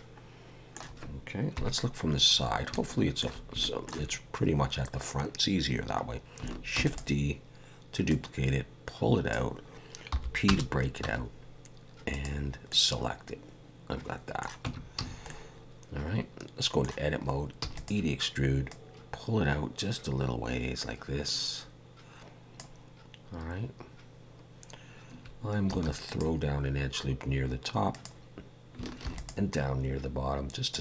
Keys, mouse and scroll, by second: 1.6 KP_3, 2.4 scroll up 2, 2.8 shift+middle click, 3.6 shift+middle click, 6.8 shift+d, 8.1 click, 10.1 p, 11.0 Tab, 12.1 click, 12.7 middle click, 14.6 Tab, 15.0 a, 15.3 middle click, 17.6 e, 18.7 click, 25.7 ctrl+r, 29.0 ctrl+r.